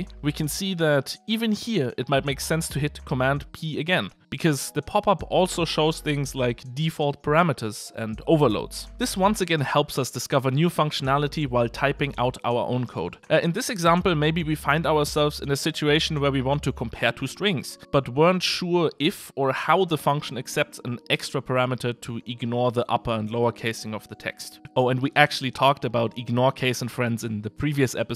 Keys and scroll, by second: 4.0 super+p, 9.1 Escape, 17.3 super+p.